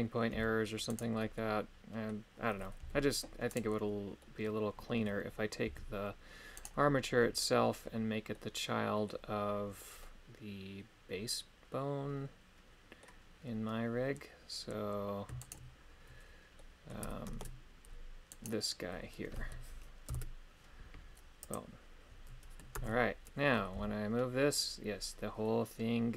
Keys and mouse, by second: 0.3 g, 0.9 right click, 1.3 middle click, 2.8 g, 4.2 middle click, 5.6 g, 8.4 middle click, 10.0-13.0 middle drag, 15.6 shift+right click, 16.5 middle click, 17.4 ctrl+Tab, 18.5 right click, 20.1 ctrl+p, 22.7 ctrl+Tab, 23.7 g.